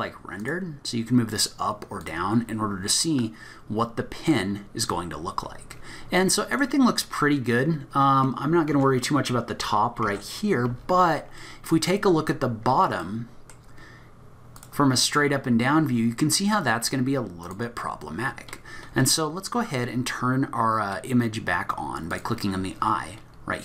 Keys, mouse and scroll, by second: 0.4 click, 2.0 click, 2.4-3.0 scroll down 3, 3.0 middle click, 3.0 scroll down 2, 5.4-6.0 scroll up 10, 6.2 middle click, 7.0-8.7 scroll down 1, 8.7 Tab, 8.7 scroll down 2, 10.0 Tab, 10.3-11.3 scroll down 7, 11.3 scroll down 5, 11.4 middle click, 12.2-13.1 scroll up 7, 13.0 middle click, 14.5 click, 15.9 scroll down 2, 16.1-16.9 scroll up 2, 17.4 click, 22.1 click.